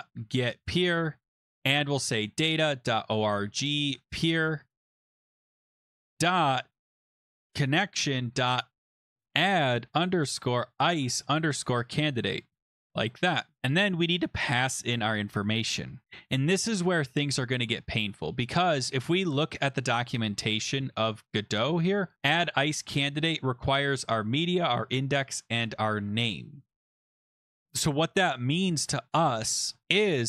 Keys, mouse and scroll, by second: 0.0-13.6 typing, 8.7 click, 8.7 scroll up 5, 18.6 click, 19.6 click, 19.8 click, 20.4 ctrl+c, 21.2 click, 21.6 ctrl+v, 22.2 click, 27.7 click, 29.8-30.2 scroll.